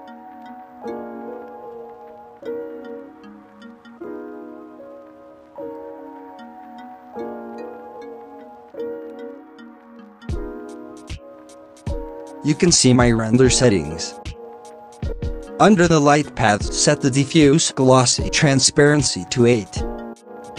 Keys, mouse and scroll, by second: 0.8-2.0 drag, 2.0 alt+a, 3.4 scroll up 4, 3.9-4.5 shift+middle drag, 4.5 scroll down 2, 5.9 ctrl+s, 8.0 click, 9.4 scroll up 6, 10.1-13.2 drag, 15.8-17.8 drag.